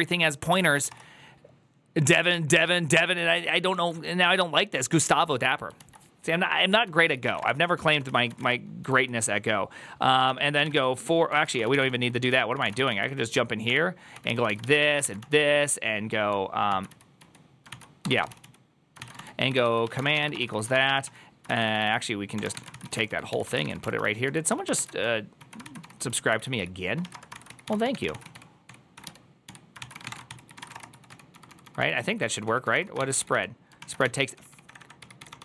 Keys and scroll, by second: 11.4 1.